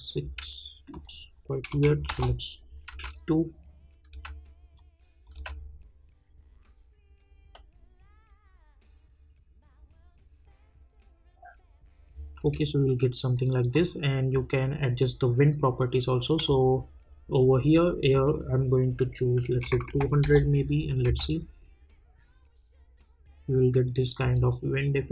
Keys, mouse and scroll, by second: 0.9 click, 2.1 Return, 2.9 space, 4.7 click, 5.3 space, 12.4 space, 13.7-16.4 drag, 20.2 Return, 21.0 space, 24.2 space.